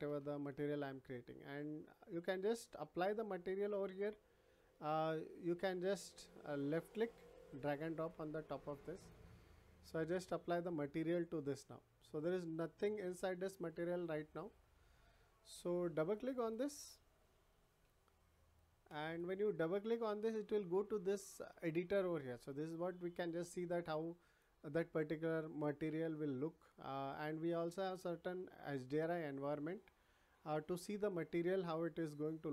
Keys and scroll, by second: 0.0 Return.